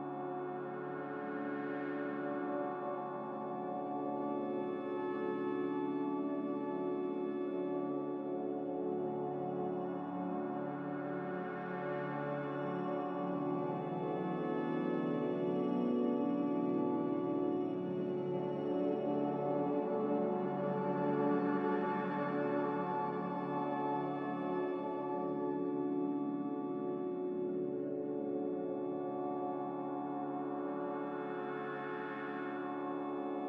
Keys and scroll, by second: 1.0 Delete, 2.3 Delete, 3.1 Delete, 3.8 Delete, 6.6-8.1 typing, 9.5-10.2 typing, 16.9 Delete, 31.2 Delete.